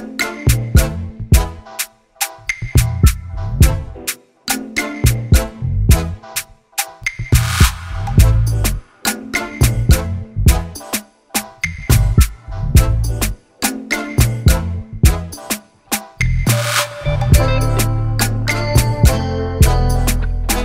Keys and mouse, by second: 0.2 click, 2.1 click, 3.5 click, 6.8 click, 8.5 click, 9.6 click, 10.2 click, 11.6 click, 13.2 click, 14.7 click, 16.6-20.2 drag.